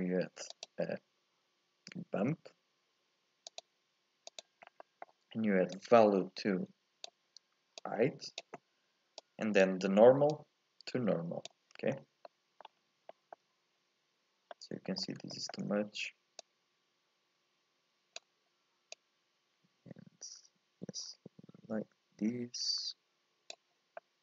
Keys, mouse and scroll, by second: 0.1 shift+a, 4.6 scroll up 2, 4.8 middle click, 5.7 click, 7.9-9.2 drag, 10.3 click, 12.0-12.3 scroll up 1, 12.3 middle click, 12.7-13.1 scroll up 1, 13.1 shift+middle click, 13.5-14.2 scroll down 2, 14.5 middle click, 15.0-15.3 scroll up 1, 15.3-16.4 shift+middle drag, 16.4-22.0 drag, 24.0-24.2 middle drag.